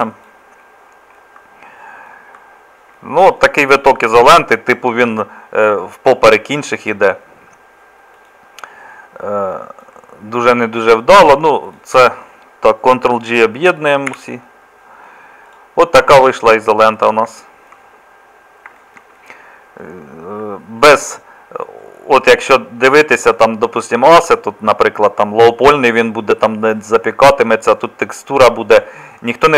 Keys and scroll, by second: 14.3 ctrl+j.